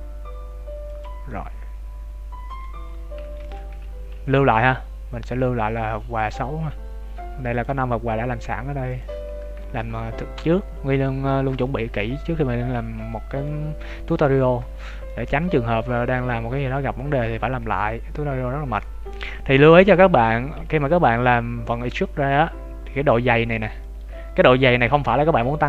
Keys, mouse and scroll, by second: 1.2 middle click, 2.8 Tab, 9.0 click, 9.6 shift+middle click, 9.8 middle click, 11.2 shift+middle click, 11.6 middle click, 15.0 shift+middle click, 15.8 middle click, 20.5-21.1 scroll up 2, 21.1 Tab, 22.7-23.7 scroll up 1, 24.5 scroll down 3, 24.9 middle click.